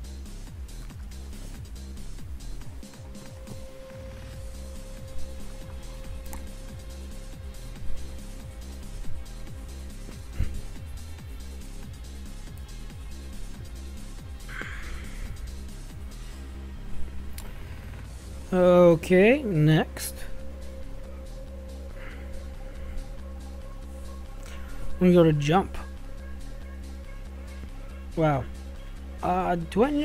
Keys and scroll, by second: 1.9 Left, 2.9 /, 5.4 ctrl+v, 8.1 shift+9, 9.3 w, 11.7 shift+=, 12.8-16.8 typing, 18.3 shift+0, 21.1 Escape.